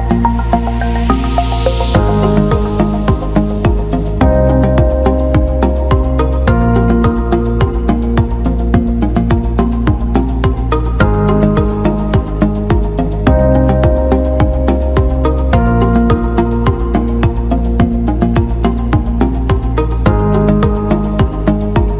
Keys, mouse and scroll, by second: 0.0-1.3 drag, 2.1 click, 3.4 click, 4.9 click, 6.1 alt+middle click, 6.9 alt+middle click, 10.1 alt+middle click, 11.2 alt+middle click, 12.2 alt+middle click, 13.0 click, 14.1 alt+middle click, 15.4 alt+shift+middle click, 17.2 ctrl+z, 18.0 click, 19.6 alt+middle click, 20.2 click, 20.8-21.9 shift+drag.